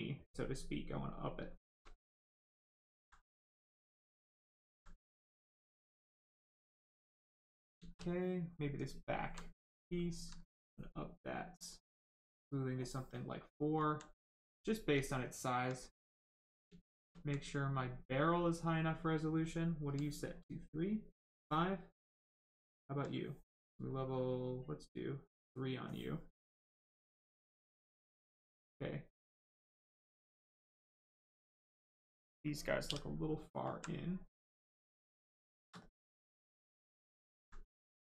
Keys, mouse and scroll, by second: 0.2 right click, 0.3 right click, 1.4 shift+right click, 1.9 alt+right click, 3.2 right click, 3.3 right click, 3.9 alt+right click, 5.0 right click, 5.1 right click, 8.0 alt+right click, 11.5 click, 13.3 right click, 13.7 alt+right click, 14.7 right click, 15.0 alt+right click, 15.7 right click, 15.7 right click, 16.6 shift+right click, 17.1 alt+right click, 17.7 right click, 17.8 right click, 22.4 alt+click, 23.9 click, 26.3 right click, 29.0 right click, 31.3 alt+click, 31.9 right click, 32.8 w, 33.7 alt+right click, 34.4 right click, 34.5 right click, 35.1 shift+right click, 36.0 alt+right click.